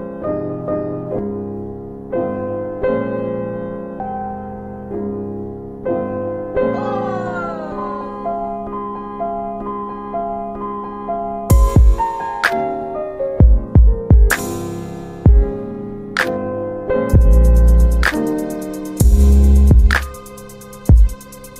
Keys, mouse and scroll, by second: 1.2 click, 4.2-5.5 typing, 7.8-9.1 typing, 10.4 middle click, 10.4-10.8 scroll down 2, 11.2 alt+middle click, 13.8 shift+click, 16.2 click, 18.6 click, 19.6-21.3 typing.